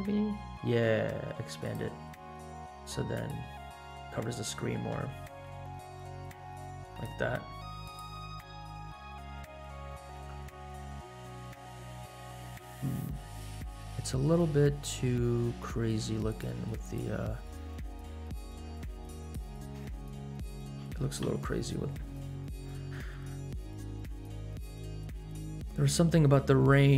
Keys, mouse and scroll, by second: 2.1-3.1 scroll down 3, 3.1 click, 4.9 s, 7.8 click, 8.4-8.9 scroll up 3, 9.4 scroll up 2, 9.8 scroll down 2, 10.1 space, 12.0 space, 16.8 click, 19.1 click, 20.2 t, 20.7 t, 21.2 n, 25.2-25.9 scroll down 1, 26.0-26.5 scroll up 2.